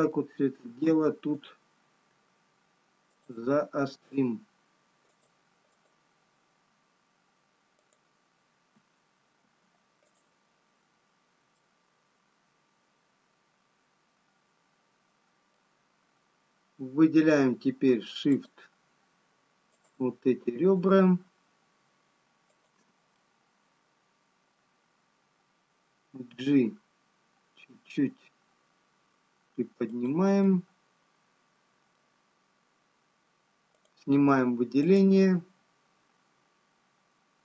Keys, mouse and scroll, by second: 1.5 alt+m, 3.5 click, 4.9 scroll up 2, 6.8 click, 8.3 click, 9.8 alt+m, 14.6 middle click, 14.6-15.9 scroll down 2, 18.6 shift+click, 23.3 shift+click, 23.3 middle click, 26.9 g, 31.4 middle click, 37.2 click.